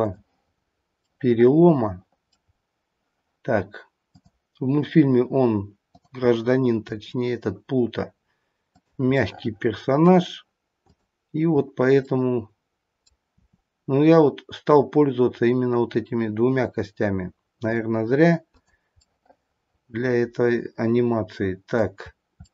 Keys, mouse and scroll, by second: 0.0 click, 0.5-1.7 scroll up 4, 0.9 middle click, 1.7 middle click, 2.5-2.9 scroll down 2, 4.1 click, 5.8 click, 7.1 r, 9.2 middle click, 10.8 click, 12.8 middle click, 13.3 middle click, 13.3 r, 18.9 middle click, 21.9-22.3 scroll up 1, 22.3 middle click, 22.3-22.5 scroll down 1.